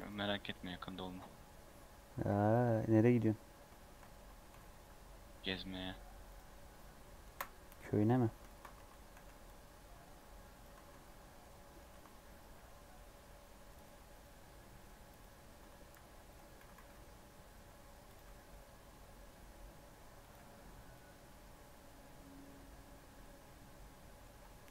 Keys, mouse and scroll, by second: 2.8-3.6 scroll down 12, 3.7 shift+middle click, 4.4 g, 7.2 KP_Decimal, 7.9 scroll down 5, 8.1 3, 8.4 shift+middle click, 8.7 alt+z, 9.1 alt+z, 9.4 click, 10.7 alt+z, 10.9 scroll down 1, 11.0-12.5 middle drag, 12.5 i, 14.0-15.8 right drag, 15.8 s, 16.5 s, 18.2 e, 20.5 Tab, 20.7 scroll down 2, 20.9-22.1 middle drag, 22.1 Tab, 22.4-24.7 middle drag.